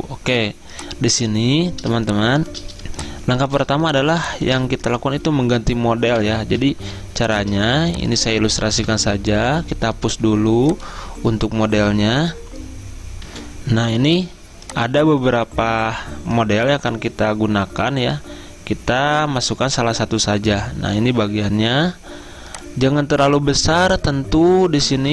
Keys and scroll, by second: 6.2 Delete, 8.8 Delete, 13.3 F10, 13.5 F10, 24.9 typing.